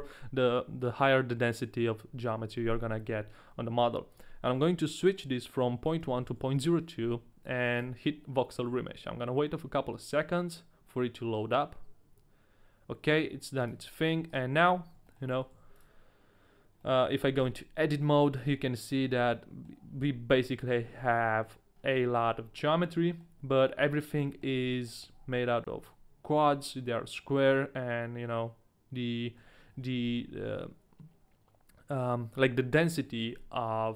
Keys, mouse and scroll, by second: 4.1 click, 7.7 click, 13.6 click, 14.1 a, 14.3 right click, 14.7-15.3 scroll up 2, 15.2 click, 15.2 right click, 15.2 shift+middle click, 15.2 a, 15.3 middle click, 15.5 w, 16.8 middle click, 18.7 Tab, 19.4 middle click, 19.4 a, 19.8 scroll up 1, 20.3 a, 20.4 scroll up 1, 20.4 middle click, 20.6 scroll down 1, 20.7-21.1 scroll up 2, 21.5 middle click, 21.5 scroll down 1, 21.7-22.8 scroll down 3, 22.2 shift+middle click, 22.8 middle click, 23.8 shift+middle click, 23.8 scroll down 3, 24.5-25.3 shift+scroll up 6, 25.1 shift+middle click, 25.6 scroll down 1, 27.4 middle click, 29.4-29.9 scroll down 2, 30.2 shift+middle click, 30.2-30.5 scroll down 1, 33.6 middle click.